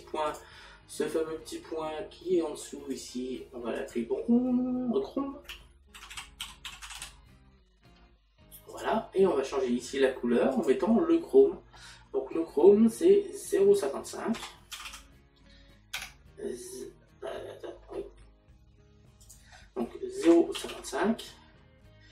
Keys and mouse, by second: 1.3 click, 14.4 KP_Decimal, 15.9 KP_5, 19.3 click, 20.3 KP_Decimal.